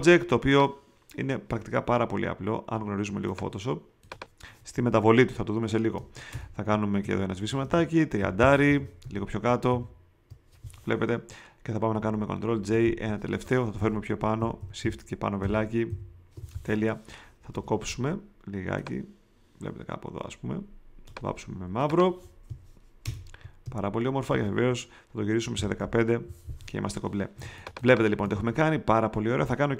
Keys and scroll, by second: 6.3 alt+BackSpace, 7.0 alt+super+BackSpace, 7.4 alt+super+d, 8.1 super+3, 8.6 3, 9.4 shift+v, 9.7 shift+Down, 12.5 super+j, 13.8 v, 14.3 shift+Up, 17.5 m, 23.0 alt+BackSpace, 23.6 alt+super+BackSpace, 24.3 alt+super+d, 25.5 i, 27.3 space, 28.1 alt+super+space.